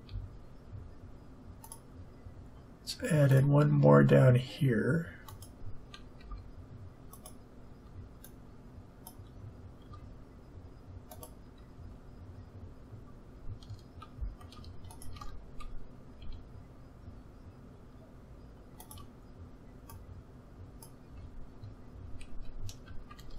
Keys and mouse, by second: 0.0 a, 1.6-3.3 drag, 6.1 s, 8.2-9.8 drag, 9.8 s, 11.7 a, 13.3 a, 15.2-18.8 drag, 16.2 s, 19.8-21.7 drag, 22.2 a.